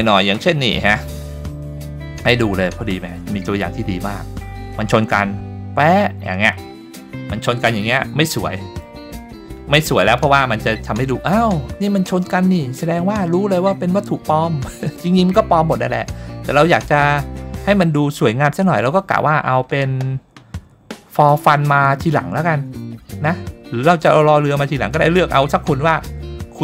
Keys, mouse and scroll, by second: 7.9-8.8 middle drag.